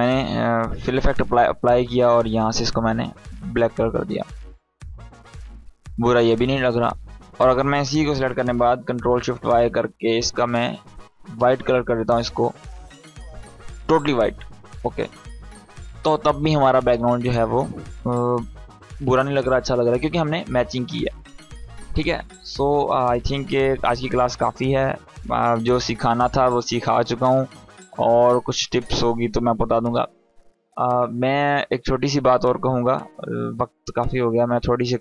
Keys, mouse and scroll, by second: 1.6 click, 6.7 click, 8.5 ctrl+shift+y, 10.0-11.3 drag.